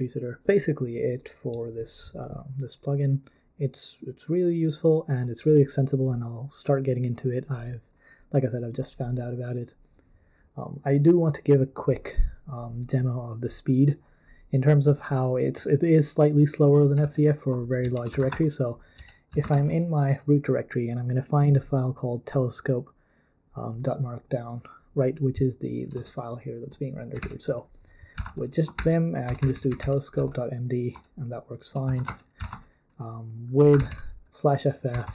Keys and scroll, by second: 17.0 super+l, 17.8 ctrl+c, 17.9-20.0 typing, 25.9 super+l, 27.2 super+l, 27.9-35.1 typing, 28.8 ctrl+p, 30.9 Return.